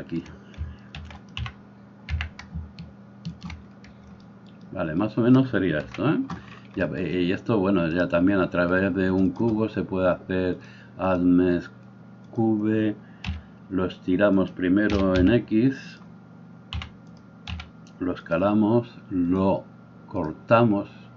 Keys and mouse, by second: 1.0 shift+d, 1.5 g, 5.9 KP_1, 10.6-14.5 drag, 13.3 s, 14.5-19.3 middle drag, 14.9 s, 16.7 g, 17.5 s, 19.3-21.1 drag.